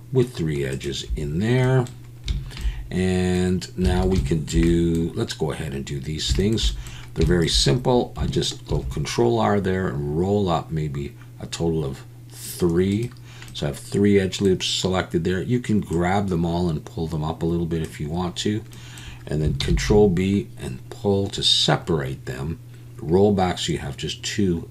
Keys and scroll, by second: 3.9 alt+a, 8.7 ctrl+r, 19.6 ctrl+b.